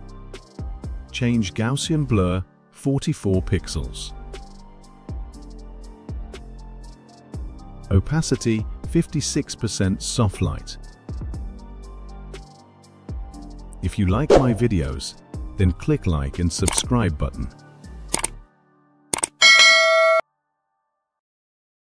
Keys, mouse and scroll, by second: 0.3 click, 1.4 click, 3.5 click, 4.4-5.8 typing, 5.8 click, 7.3 click, 8.9-9.7 typing, 11.1 click, 11.5-14.9 typing, 11.7 click, 15.7 click, 16.0 space.